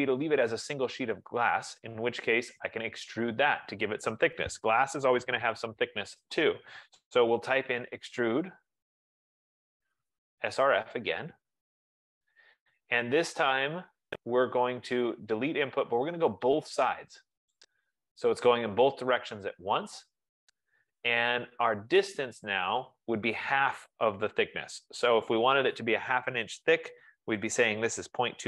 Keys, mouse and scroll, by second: 7.8-12.5 typing, 11.6 Return, 16.4 Return, 17.6 click, 27.8-28.4 typing.